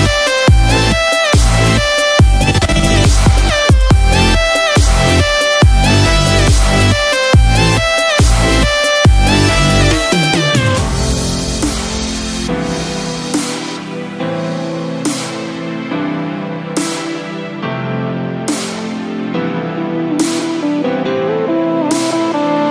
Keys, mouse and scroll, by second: 4.6 middle click, 4.6 click, 4.6-5.3 scroll down 5, 21.4-22.7 scroll down 1.